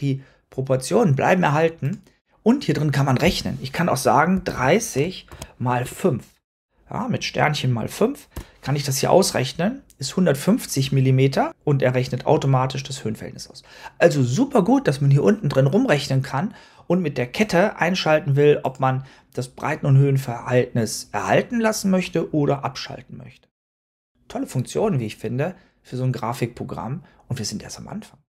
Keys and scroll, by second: 4.0-5.7 typing, 8.2 Return.